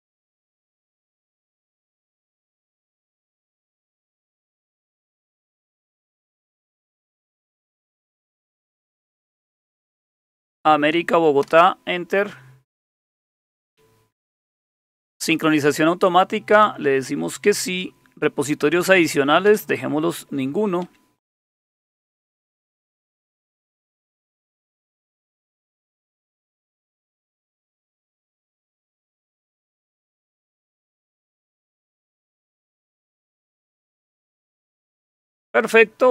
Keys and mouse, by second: 0.2 Down, 0.4 Down, 1.2 Down, 1.4 Down, 1.6 Down, 2.0 Down, 2.2-3.2 Down, 3.8 Down, 3.8 Down, 4.0 Down, 4.4 Down, 4.6 Down, 5.0 Down, 5.2 Down, 5.4 Down, 5.9 Down, 6.1 Down, 6.4 Down, 6.7 Down, 6.8 Down, 7.1 Down, 7.3 Down, 8.0 Down, 8.2 Down, 8.4 Down, 8.6 Down, 9.2 Up, 9.7 Up, 11.4 Return, 16.6 Down, 19.5 Down, 20.8 Down, 22.3 Up, 22.5 Up, 27.7 Down, 30.5 Down, 31.1 Down, 32.2 Down, 33.3 Up, 34.2 Up.